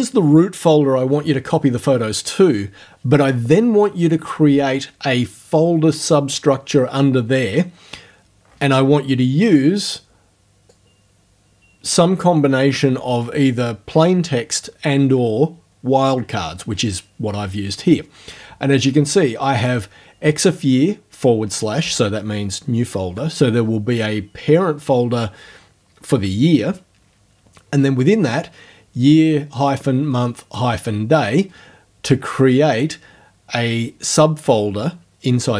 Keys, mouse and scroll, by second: 10.7-12.1 drag, 19.6 click.